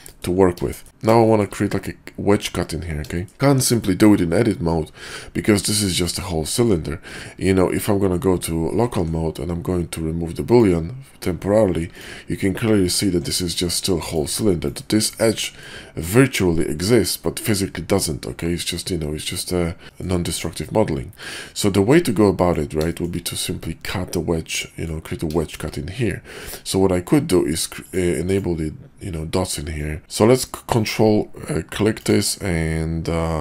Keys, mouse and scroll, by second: 0.1 drag, 0.7 shift+drag, 1.3 shift+drag, 3.1 shift+drag, 3.3 Tab, 3.7 click, 5.5 middle click, 6.5 Tab, 8.1 /, 10.5 ctrl+`, 12.9 ctrl+`, 15.4 middle drag, 17.2 middle drag, 18.3-18.7 middle drag, 19.2 /, 19.8 shift+middle drag, 20.4-21.2 middle drag, 22.2-22.5 middle drag, 22.8 shift+middle drag, 24.6-24.9 middle drag, 25.3 shift+middle drag, 27.8 click, 28.2 click, 29.8 ctrl+click, 30.7-33.4 ctrl+drag.